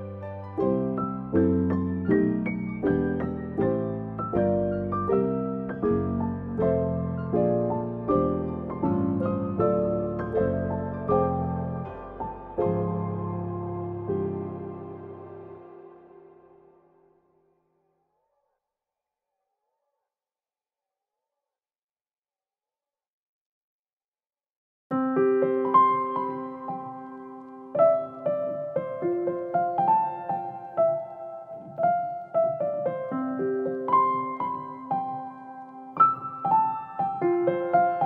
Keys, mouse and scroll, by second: 0.6 Tab, 2.2 middle click, 2.4 click, 2.6 middle click, 3.0 shift+click, 3.6 g, 5.1 click, 5.4 middle click, 5.9 click, 6.6 g, 8.1 click, 8.4 middle click, 9.5 click, 9.8 middle click, 10.1 shift+click, 11.0 ctrl+i, 12.2 middle click, 12.8 s, 13.7 g, 16.6 click, 19.2 click, 19.6 middle click, 20.9 click, 21.5 middle click, 22.4 middle click, 23.3 u, 28.9 click, 29.2 middle click, 31.2 click, 32.4 s, 35.2 alt+q, 35.6 middle click, 37.4 middle click.